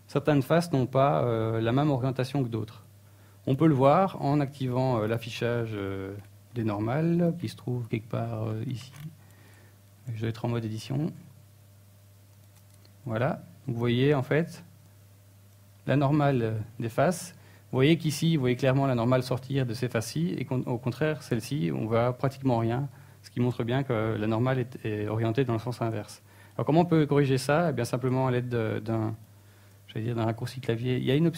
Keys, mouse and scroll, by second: 9.1 n, 9.8-11.0 scroll down 10, 11.3 click, 11.5-12.0 scroll down 2, 11.8-12.2 scroll up 3, 12.4 click, 12.6 scroll down 1, 13.3-14.1 scroll up 4, 14.1-14.5 scroll down 4, 15.0 ctrl+Tab, 17.4 click, 17.8 shift+middle click, 18.7 click, 19.6 click, 20.6 shift+space, 21.0 t, 21.4 n, 21.8 middle click, 31.0 a.